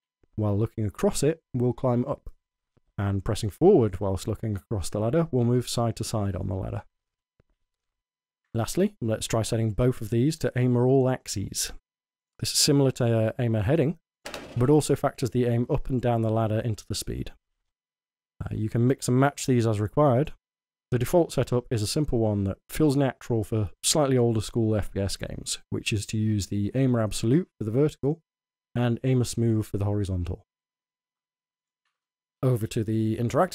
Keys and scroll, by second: 0.0-8.0 typing, 12.9 a, 13.3 a, 15.0 w, 17.5 d, 24.9 w, 26.3 w, 32.4-33.5 typing.